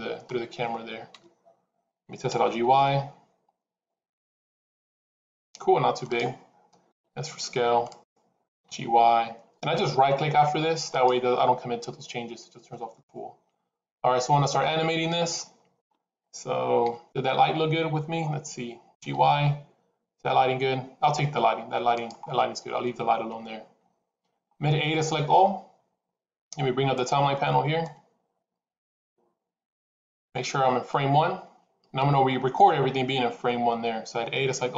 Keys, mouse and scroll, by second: 1.0 KP_0, 2.2 g, 6.8 s, 8.4 g, 13.9 KP_7, 14.8-15.2 scroll down 3, 15.2 shift+middle click, 16.7 KP_0, 18.8 g, 23.2 KP_7, 25.1 a, 27.7 click.